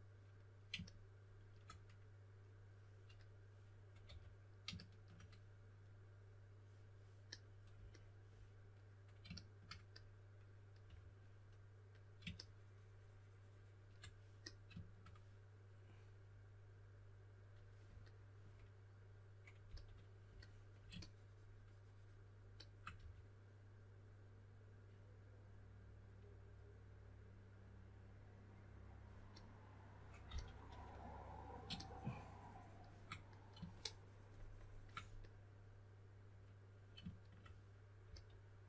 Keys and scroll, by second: 4.0 4, 10.8 3, 19.6 s, 22.9 3, 30.0-31.1 typing, 38.0 s.